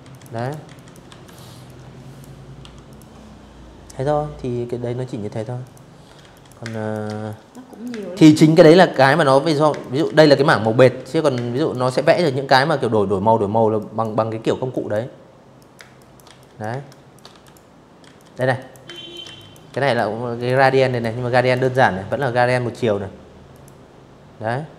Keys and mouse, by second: 0.3 Delete, 0.6 click, 3.3 click, 3.8-5.9 typing, 4.0 click, 4.3 click, 5.0 click, 5.3 click, 5.7 click, 6.0 click, 6.6 click, 6.9 click, 7.3-9.5 typing, 7.4 click, 7.8 click, 8.7 click, 9.7 click, 11.4 click, 12.4 click, 13.3 click, 13.4-17.3 typing, 13.6 click, 14.1 click, 14.5 click, 15.1 click, 15.8 click, 16.2 click, 16.6 click, 17.0 click, 17.5 click, 18.0 click, 18.2 click, 18.5 click, 19.1 click, 19.2 click, 19.7 click, 21.2 click, 22.8 Escape, 23.3 Escape, 24.0 z, 24.1 click, 24.4 v.